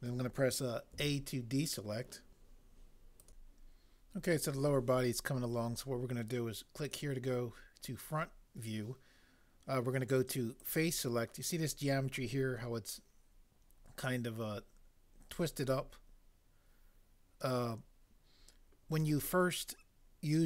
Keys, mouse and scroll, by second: 0.9 a.